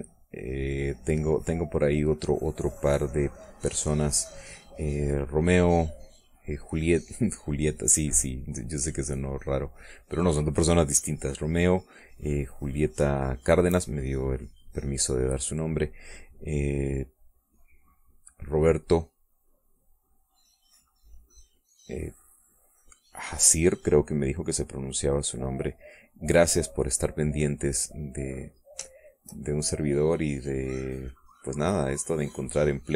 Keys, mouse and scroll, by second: 1.2-4.6 drag, 5.2 middle click, 6.6 click, 7.6 click, 9.6-11.1 drag, 12.5-14.3 drag, 15.2 middle click, 15.8 middle click, 16.6-19.6 drag, 20.1-22.0 drag, 22.2-25.4 drag, 25.8-27.7 drag, 28.1 middle click, 29.0 middle click, 29.7 shift+click, 30.4-32.5 shift+drag, 32.6-32.9 shift+drag.